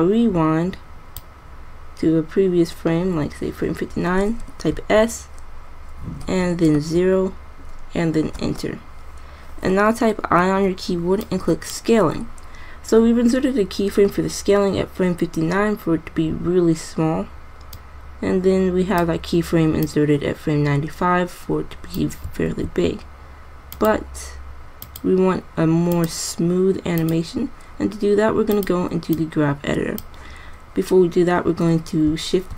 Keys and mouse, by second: 0.0-1.7 drag, 4.9 s, 10.6 i, 17.9-19.7 drag, 20.0 click, 22.7 alt+a, 31.2 middle click.